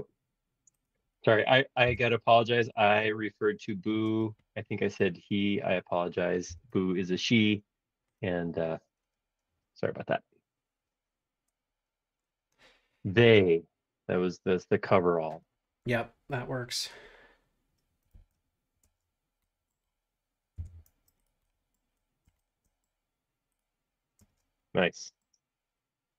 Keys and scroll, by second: 1.9 b, 4.0 space, 4.2 Escape, 6.4 b, 18.1 super+z, 18.8 space, 20.5 b, 24.2 space.